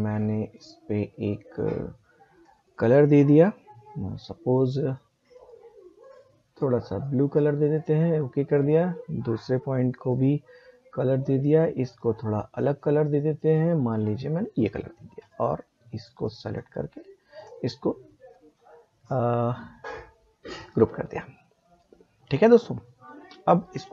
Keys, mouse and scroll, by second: 2.4 click, 4.9 click, 17.3 right click, 20.5 click.